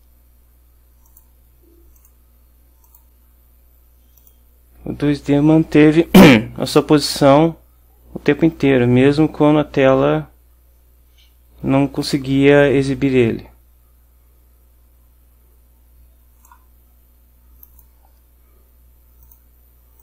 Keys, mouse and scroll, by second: 1.1 click, 2.1 click, 2.9 click, 4.3 click, 6.9-16.7 drag, 17.7 click, 19.3 click.